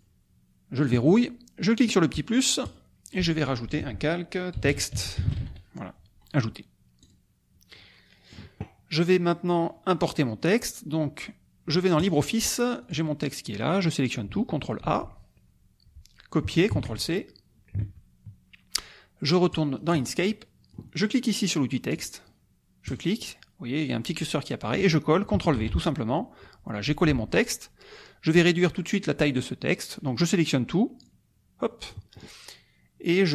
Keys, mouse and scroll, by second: 0.8 click, 2.6 click, 4.3-5.9 typing, 7.0 click, 7.7 middle click, 11.9 click, 12.8 click, 13.7 click, 14.8 ctrl+a, 16.7 ctrl+c, 17.8 alt+Tab, 19.7 alt+click, 20.3 alt+click, 21.9 click, 22.8 click, 25.5 ctrl+v, 31.0-32.1 drag.